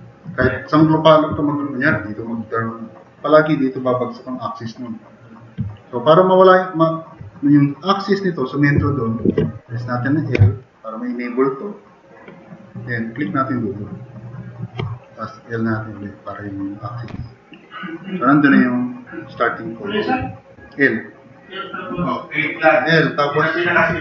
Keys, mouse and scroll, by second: 8.9 click, 10.4 i, 23.7 e.